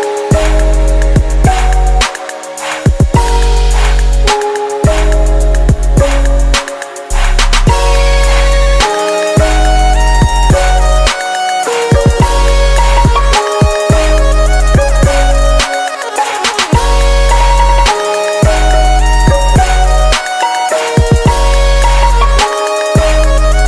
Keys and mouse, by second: 0.5 s, 2.3-4.2 middle drag, 4.2-5.9 drag, 5.9 KP_0, 7.1 s, 8.4 middle click, 10.1 right click, 10.3 click, 10.7-11.9 right drag, 11.6 ctrl+p, 16.8-18.6 drag, 18.1 middle click, 18.6-21.9 middle drag, 21.9 shift+a.